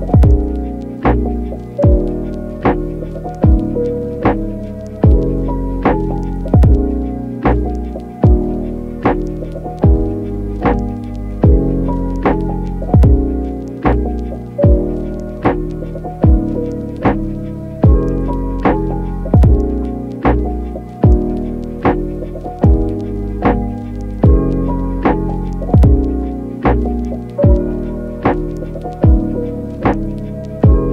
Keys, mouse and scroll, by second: 1.2 ctrl+z, 1.6 ctrl+z, 4.0 [, 4.7 ], 5.3 click, 6.2 click, 6.8-8.2 typing, 7.3 click, 7.9 click, 8.2 click, 8.8 click, 10.0 ], 10.3 click, 11.0 ], 11.3 ], 11.5 click, 11.7 click, 12.7 click, 13.1 click, 13.6-15.2 typing, 15.5 click, 17.2 click, 19.4 ctrl+z, 20.0 ctrl+z, 20.0 ], 20.2 ], 23.8 ctrl+z, 23.8 click, 26.3 click, 26.9 ], 27.7 click, 27.9 click, 28.7 click, 28.8 click.